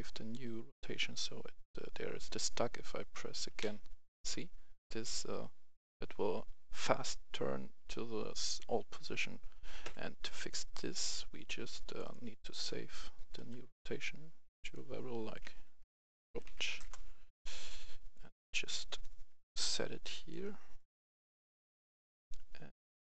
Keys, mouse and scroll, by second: 9.7 Escape, 10.7 right click, 11.8 click, 12.3 right click, 13.4 click, 15.3-16.6 typing, 16.7 Return, 17.6-18.9 drag, 19.4 ctrl+click, 20.7-21.9 drag.